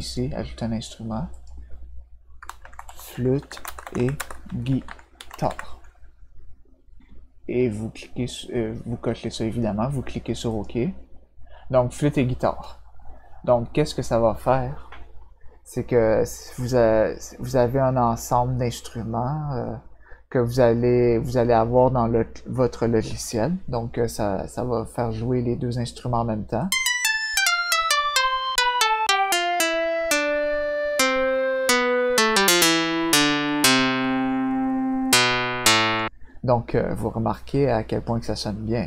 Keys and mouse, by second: 1.3 click, 2.3-5.9 typing, 10.5 click, 26.5-35.9 drag.